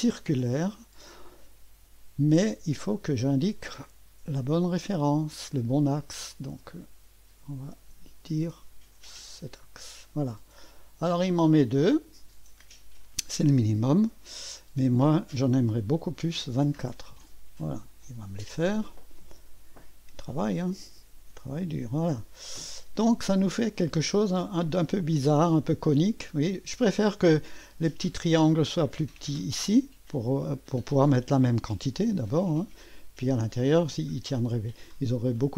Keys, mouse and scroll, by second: 0.0 click, 3.1 click, 5.1 click, 6.3 click, 9.3 click, 10.4-13.1 drag, 13.5 click, 14.5 click, 16.3-17.0 typing, 17.1 Return, 22.3-23.4 scroll up 1, 23.4-25.7 drag, 29.5 click, 32.0-33.4 drag, 33.7 click.